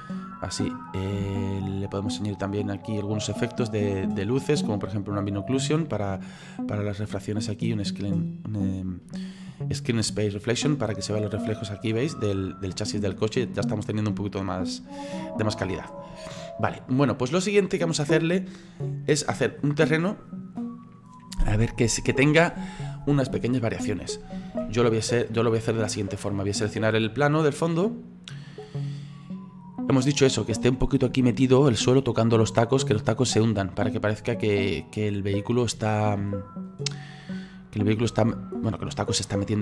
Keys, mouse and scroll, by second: 0.8-1.3 scroll up 4, 1.3-3.6 shift+middle drag, 3.6 click, 5.2 click, 7.5 click, 12.1 click, 12.3 click, 13.0-15.4 middle drag, 15.4 scroll down 2, 15.7-18.5 shift+middle drag, 18.5-18.9 scroll down 3, 18.9-21.9 middle drag, 26.4 click, 27.3 right click, 28.8-30.0 scroll up 4, 30.0-35.0 middle drag, 35.0 right click, 35.9 shift+middle click, 36.7-39.6 drag.